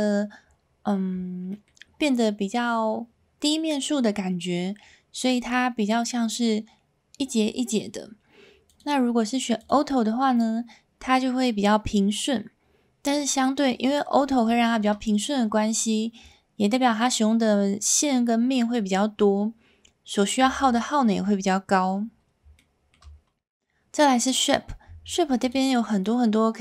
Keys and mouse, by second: 1.5 middle click, 8.7-9.7 drag, 14.5 shift+middle drag, 14.8-15.2 middle drag, 22.6-22.9 shift+middle drag, 25.4-26.6 drag.